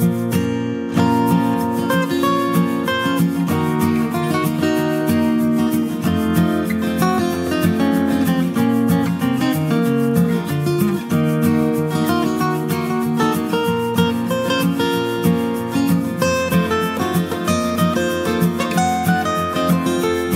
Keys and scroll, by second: 10.8 ctrl+j.